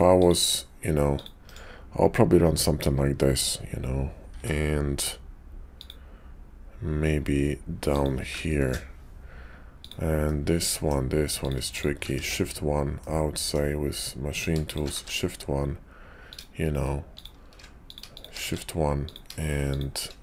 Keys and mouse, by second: 1.5 right click, 4.2 k, 9.7 click, 10.2 middle click, 12.1 shift+1, 12.9 middle click, 14.9 shift+1, 16.2 click, 18.4 shift+1, 18.9 click, 20.1 click.